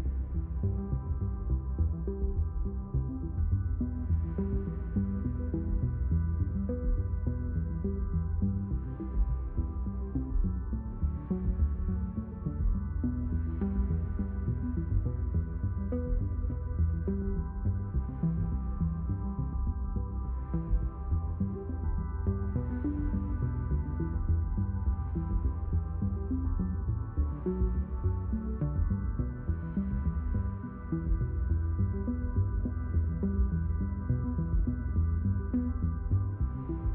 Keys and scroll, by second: 28.1 w, 30.8 q, 34.0-35.6 typing, 36.8-36.9 typing.